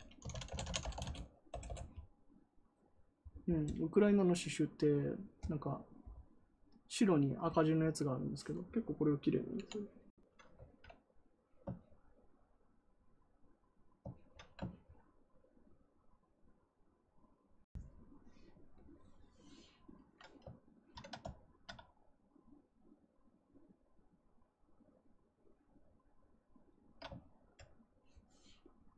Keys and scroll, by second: 0.0-1.3 typing, 1.4 Return.